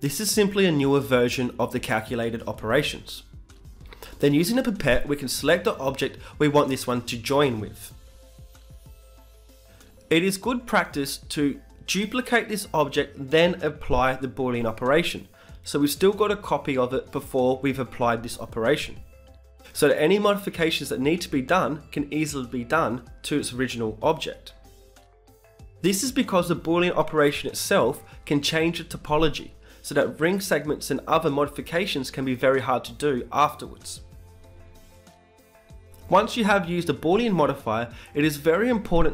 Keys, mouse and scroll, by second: 10.8-13.1 middle drag, 11.1 z, 13.7 t, 16.2 KP_Add, 16.5 KP_Add, 16.8 KP_Add, 17.0 KP_Add, 18.5-20.4 drag, 20.6-22.4 drag, 23.5 shift+d, 24.7-35.4 drag, 35.4 Tab, 37.4 a, 37.6 a, 37.7-39.1 drag.